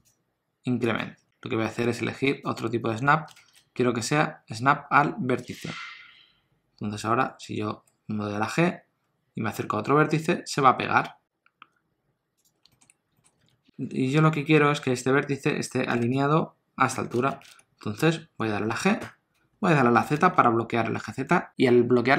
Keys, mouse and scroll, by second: 2.3 click, 7.7 g, 12.7 shift+middle click, 12.9 scroll up 1, 13.2 shift+middle click, 13.4 alt+z, 19.0 g.